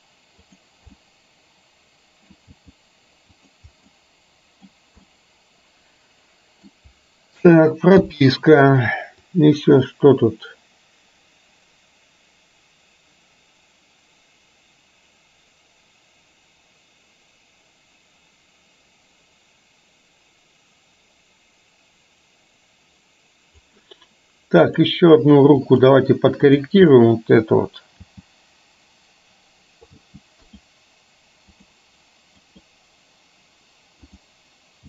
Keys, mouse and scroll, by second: 0.6 drag, 1.1-2.5 middle drag, 2.6 g, 4.0 scroll up 1, 4.1 middle click, 5.1-6.7 middle drag, 6.7 scroll down 1, 9.5-23.8 drag, 24.7 drag, 25.7 click, 26.6 drag, 27.0 middle click, 28.1 g, 30.1 g, 30.5 click, 31.6 click, 32.5 click.